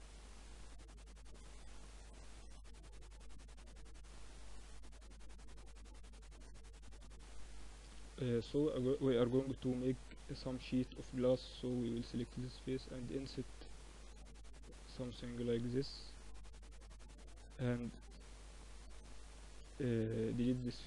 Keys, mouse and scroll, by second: 1.6 KP_1, 2.8 KP_3, 3.4 z, 4.2 middle click, 5.2 r, 6.3-7.4 middle drag, 8.4 ctrl+r, 10.1 middle click, 10.9 click, 11.8-15.5 middle drag, 13.0 i, 16.1 middle click, 16.9 a, 17.7 a, 18.4 x, 19.9 a, 20.1 a, 20.4 a.